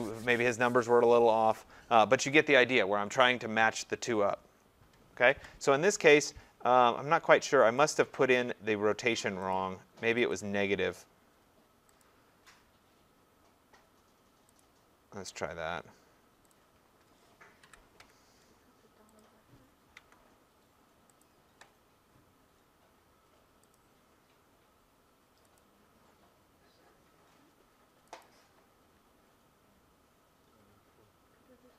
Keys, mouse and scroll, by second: 7.9 click, 9.5 click, 10.3 click, 12.0 click, 14.6 click, 15.3 scroll, 16.5 click, 17.6 BackSpace, 18.6-19.2 scroll, 19.2 click, 20.0 Tab, 21.2 click, 23.8 click, 25.6 click, 28.2 click.